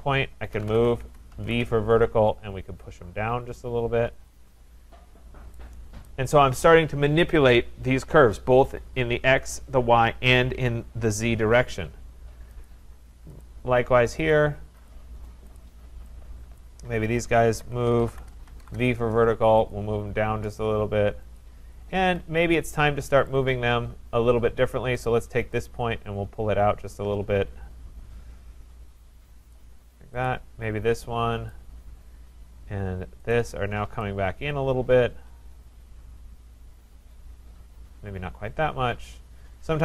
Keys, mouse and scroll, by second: 0.3-2.1 typing, 2.8 click, 4.4 click, 6.1 right click, 12.7 click, 13.4 click, 14.3 click, 14.9 click, 16.1 click, 16.6 click, 17.2-19.0 typing, 19.7 click, 21.4 click, 22.0 Escape, 23.3 click, 25.1 click, 29.5 click, 30.2 click, 31.5 click, 33.3 shift+click, 39.0-39.7 scroll, 39.7 scroll.